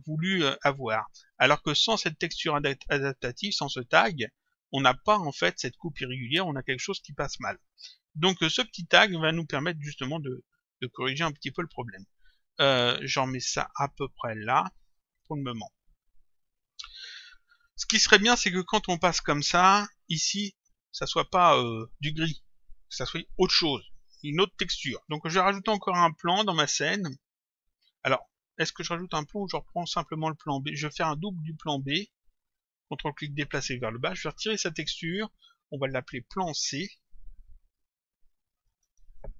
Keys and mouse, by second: 0.0 click, 3.5 click, 7.5 click, 8.8 click, 12.9 click, 16.8 click, 18.9 click, 26.5 click, 29.8 click, 32.1 ctrl+click, 34.7 click, 35.4 Delete, 36.1 click, 38.2 End, 38.6 BackSpace.